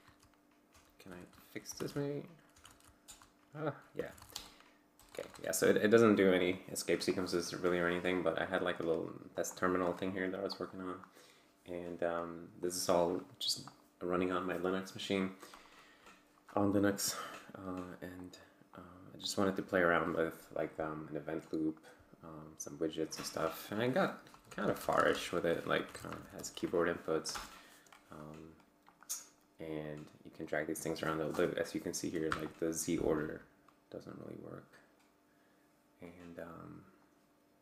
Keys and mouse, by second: 0.0-2.6 typing, 3.0 Return, 3.7-4.7 typing, 4.9 Return, 8.7-10.0 drag, 10.5-11.2 drag, 12.1 click, 12.6-13.8 drag, 15.6 click, 18.2 click, 18.7 click, 19.2-20.9 drag, 21.4 click, 22.6 click, 24.3 BackSpace, 25.5-26.8 typing, 27.3 Return, 28.9-29.6 drag, 29.8-31.3 drag, 33.2-34.4 drag, 36.4 click.